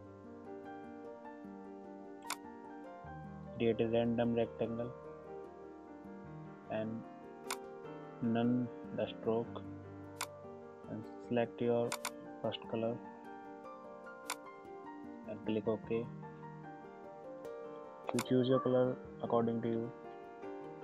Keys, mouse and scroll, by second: 2.3-7.6 drag, 10.2 click, 14.3 click, 18.2 click.